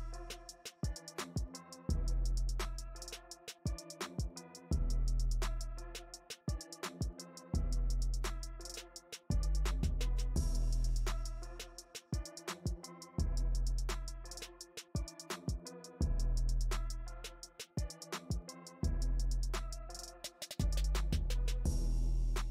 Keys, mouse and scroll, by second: 4.3-6.0 shift+drag, 6.0-11.4 middle drag, 11.4 space, 11.9 f, 12.7-16.1 drag, 16.1-17.2 middle drag, 17.2 p, 17.9-22.5 drag.